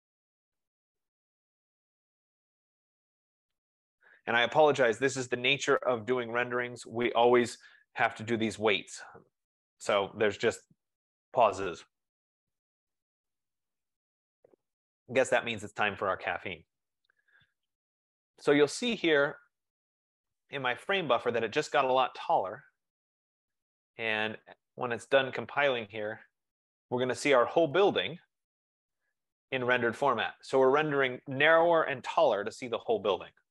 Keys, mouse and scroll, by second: 20.1-24.7 drag, 24.7 F15.